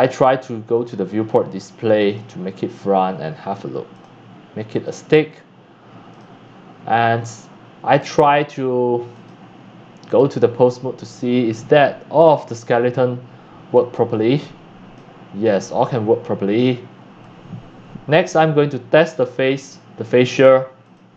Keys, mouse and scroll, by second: 0.7 click, 2.0 click, 2.5 middle click, 3.1 middle click, 3.9 click, 4.7 click, 6.1 click, 8.0 click, 9.1 click, 10.1 click, 11.1 click, 12.6 click, 12.7-14.7 drag, 15.8 click, 17.2-18.2 drag, 19.1 click, 19.7 click, 20.3 click, 20.7 click.